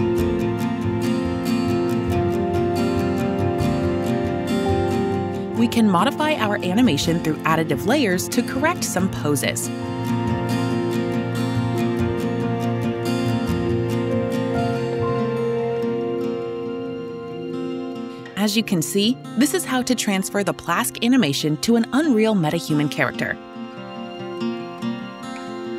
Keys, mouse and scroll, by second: 1.5 click, 5.6 click, 6.9 click, 18.2-24.6 typing.